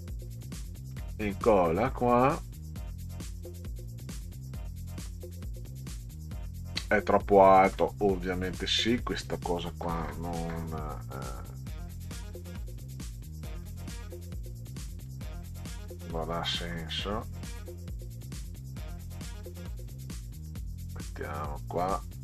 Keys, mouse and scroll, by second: 0.9 ctrl+v, 2.9 click, 5.1 middle click, 8.5 click, 14.4 Delete, 15.1 click, 16.7 Delete, 18.0 click, 19.5 Delete, 20.5 click, 21.0 Delete.